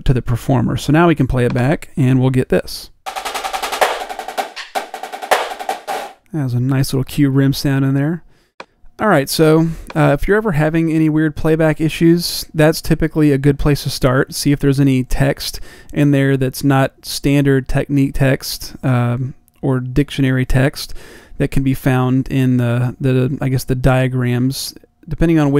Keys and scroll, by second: 4.3 d.